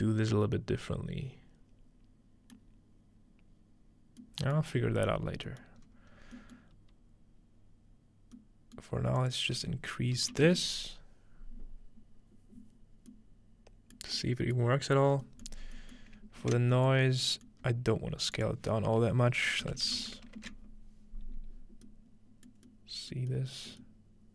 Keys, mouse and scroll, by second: 4.2 middle click, 5.2-5.8 scroll down 1, 5.5 middle click, 5.8-6.3 scroll up 2, 6.6-8.4 middle drag, 8.8 middle click, 9.2-11.1 drag, 14.1 middle click, 14.6 middle click, 14.9-15.6 scroll down 2, 15.6 scroll up 2, 16.4 ctrl+space, 17.0-19.7 ctrl+middle drag, 17.0-19.7 scroll up 1, 18.4-20.3 drag, 20.4 ctrl+space, 21.9-22.5 middle drag, 22.7-23.3 middle drag, 23.7 middle click.